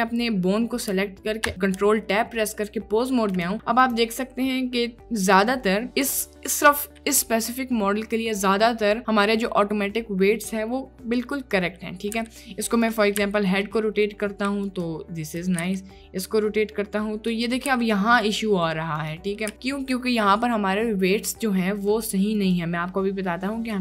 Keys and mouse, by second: 1.5 ctrl+Tab, 3.4 click, 3.9 click, 12.2 r, 13.2 r, 15.3 click, 15.7 r, 17.7 r, 19.5 r.